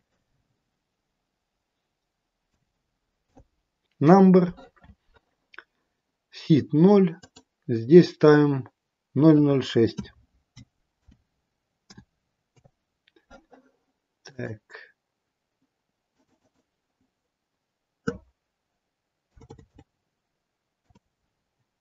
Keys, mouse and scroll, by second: 0.0 KP_0, 7.0 click, 14.2 click, 16.1 click, 19.3 BackSpace.